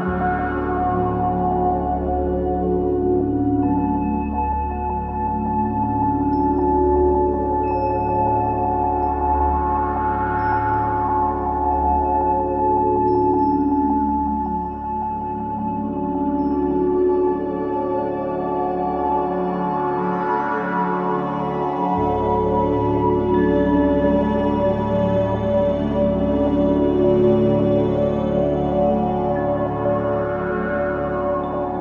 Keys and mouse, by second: 0.7-3.0 drag, 1.4-2.5 typing, 3.9-10.5 typing, 4.2-4.6 drag, 6.8 click, 8.5-8.9 drag, 12.3 click, 13.3 click, 14.2 g, 14.6 x, 15.3-16.7 drag, 15.6-18.5 typing, 18.2 click, 19.8 space, 21.0-22.3 drag, 21.4 typing, 24.0 ctrl+alt+click, 25.3 click, 26.9-27.6 drag, 28.7-30.7 drag, 31.3-31.8 drag.